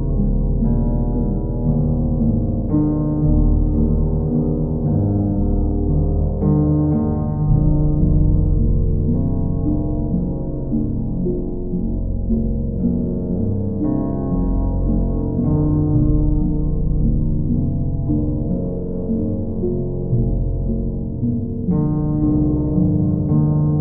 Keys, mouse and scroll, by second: 2.6 click, 3.5 click, 3.8 shift+click, 4.4 alt+click, 5.8 ctrl+click, 6.3 ctrl+click, 7.0 w, 9.9 alt+click, 13.1 click, 15.0 click, 17.0 click, 17.6 ctrl+click, 19.2 ctrl+click, 19.7 ctrl+click, 22.5 click.